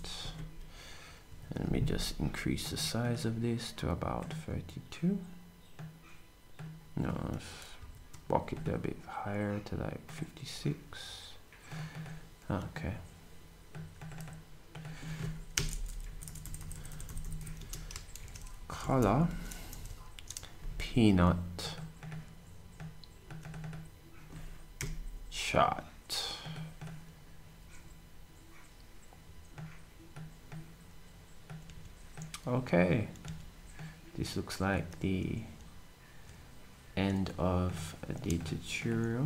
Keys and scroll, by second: 0.0-1.8 typing, 15.5 BackSpace, 15.9 n, 16.4 Right, 16.6 Right, 16.7 Right, 16.9 Right, 17.0 Right, 17.2 Right, 17.4-19.2 Right, 17.5-20.2 typing.